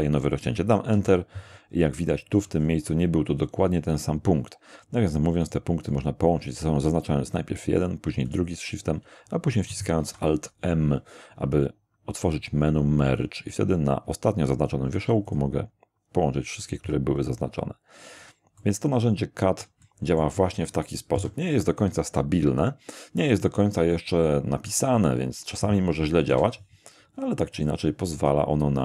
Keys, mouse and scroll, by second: 0.9 Return, 2.0-3.1 scroll up 1, 5.4 right click, 8.3 shift+middle click, 10.0 alt+m, 15.3 click, 16.6-17.6 scroll down 3, 18.1 a, 18.6 middle click, 21.1 shift+3, 23.7 scroll down 1, 26.3 k, 27.5 click, 28.2 click.